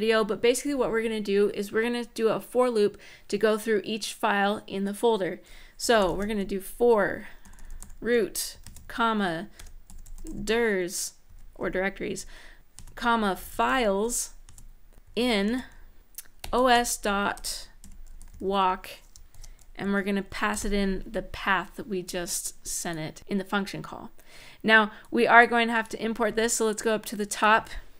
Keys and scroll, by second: 5.3-11.0 typing, 12.6-20.8 typing, 27.8 Return.